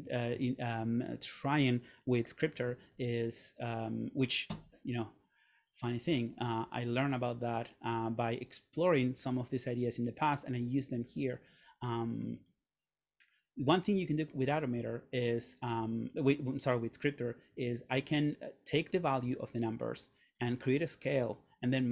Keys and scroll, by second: 0.2 super+a.